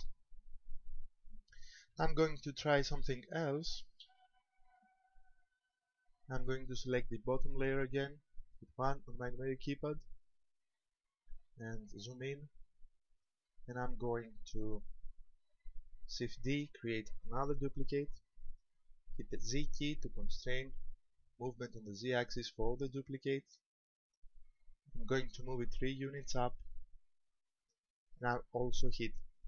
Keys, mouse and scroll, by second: 4.0 Escape, 5.6 right click, 8.9 KP_1, 10.8 shift+middle click, 11.5-12.9 scroll up 8, 13.5 shift+middle click, 16.7 shift+d, 26.2 ctrl+click, 26.8 middle click.